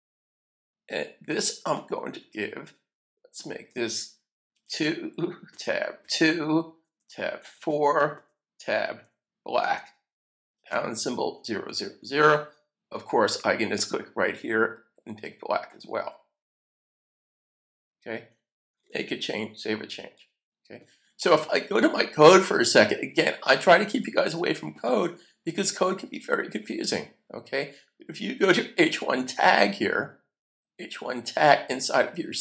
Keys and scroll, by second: 4.6 2, 5.5 Tab, 6.6 2, 7.4 4, 8.7 4, 10.6-12.6 typing, 18.7 super+s.